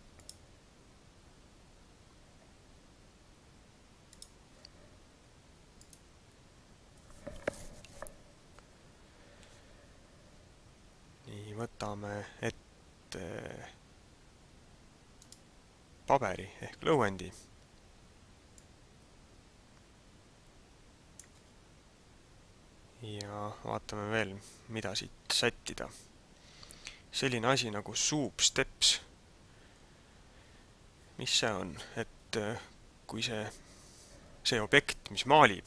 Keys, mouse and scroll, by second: 6.1 click, 15.2 right click, 18.8 click.